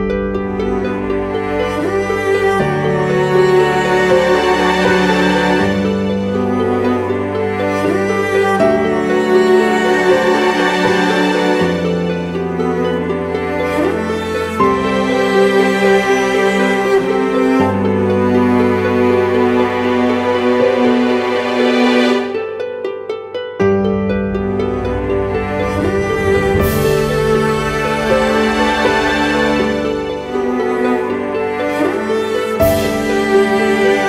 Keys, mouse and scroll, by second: 3.6-6.2 scroll down 1, 8.6-9.9 typing, 16.6 double click, 22.2 double click, 24.2-26.2 typing, 27.6 double click, 32.5-34.0 typing.